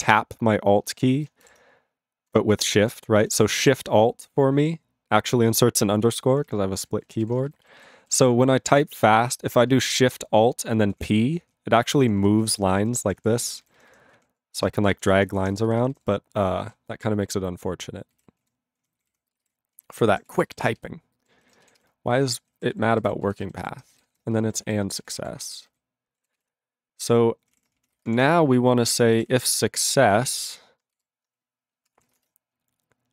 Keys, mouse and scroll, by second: 0.9 BackSpace, 6.3 ctrl+k, 6.4 ctrl+k, 6.8 ctrl+e, 7.3 ctrl+s, 7.6 alt+b, 7.7 alt+b, 8.6 ctrl+o, 10.9 alt+p, 11.4 alt+p, 11.8 alt+p, 12.0 alt+p, 12.2 alt+p, 12.4 alt+n, 12.5 alt+n, 12.6 alt+n, 12.8 alt+n, 13.0 alt+p, 13.2 alt+p, 13.4 alt+n, 13.6 alt+n, 13.8 alt+n, 14.1 alt+p, 14.9 ctrl+n, 15.1 alt+p, 15.2 alt+p, 15.4 alt+p, 15.5 alt+n, 15.6 alt+n, 15.9 alt+n, 16.6 ctrl+p, 18.1 ctrl+e, 18.4 ctrl+a, 18.7 ctrl+p, 18.9 ctrl+k, 19.0 ctrl+k, 19.3 ctrl+space, 19.4 ctrl+e, 19.7 ctrl+g, 20.3 ctrl+s, 20.6 alt+b, 20.7 alt+b, 22.6 ctrl+=, 23.2 ctrl+e, 23.4 ctrl+b, 23.6 ctrl+b, 24.1 &, 24.5 ctrl+a, 24.6 ctrl+e, 25.1 ctrl+s, 25.2 ctrl+a, 25.6 ctrl+n, 26.3 ctrl+s, 27.5 ctrl+o, 27.5 Tab, 27.6-32.2 typing, 32.1 ctrl+e.